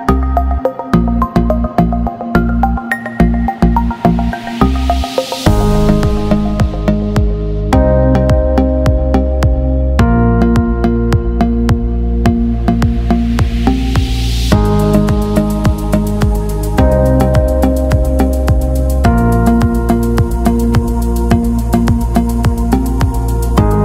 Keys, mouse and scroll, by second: 2.3 x, 3.3 click, 5.9 t, 6.1 click, 6.4 a, 7.4 click, 13.4 t, 13.6 click, 14.4 v, 15.8 click, 19.3 alt+scroll down 1, 20.3 click.